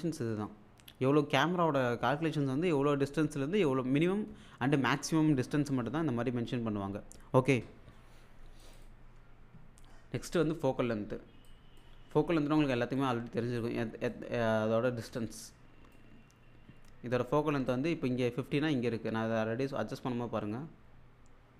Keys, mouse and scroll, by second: 0.7 scroll up 1, 8.6 click, 10.6-11.0 scroll down 1, 11.5-12.1 click, 12.0-12.4 scroll down 1, 12.7 alt+click, 14.3 scroll down 1, 15.2-16.1 alt+drag, 19.6-21.5 drag.